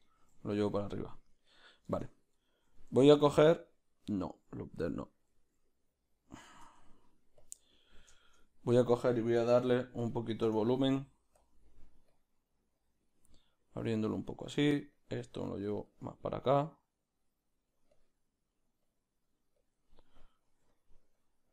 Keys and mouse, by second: 0.1 g, 1.3 right click, 2.0 Tab, 2.4-11.4 ctrl+middle drag, 4.7 z, 7.5 Tab, 7.5 b, 10.6 f, 11.4-20.5 drag, 14.7 f, 20.7 f, 21.1 click.